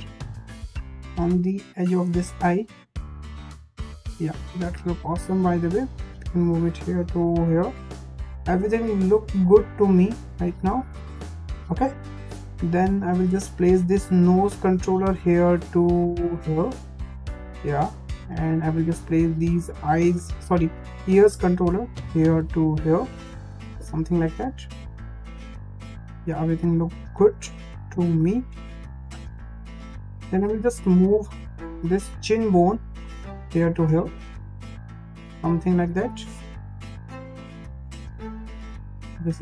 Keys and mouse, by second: 0.8 click, 0.9 click, 1.9 click, 2.6 click, 3.7 click, 4.3 click, 5.5 click, 6.4 click, 6.5 click, 7.8 click, 8.6 click, 8.7-9.7 drag, 12.9 shift+middle click, 13.5 click, 14.5 click, 14.6-15.6 drag, 15.9 click, 16.7 click, 18.1 shift+middle click, 18.8 click, 18.9 click, 20.0 click, 21.1 click, 22.0 click, 23.1 click, 24.1 click, 24.8 click, 25.0 click, 25.7 click, 26.2 click, 27.0 click, 28.1 click, 28.7 click, 29.1 click, 30.0 shift+middle click, 30.9 click, 31.7 click, 31.8 click, 32.9 click, 33.0 click, 34.0 click, 34.5 click, 34.6 click, 35.9 click, 36.9 click, 37.0 click, 38.1 click, 38.9 click.